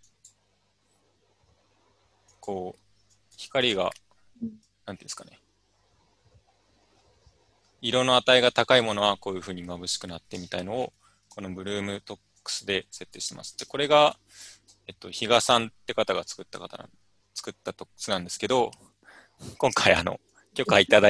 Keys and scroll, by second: 11.0 ctrl+z, 13.7 alt+Tab.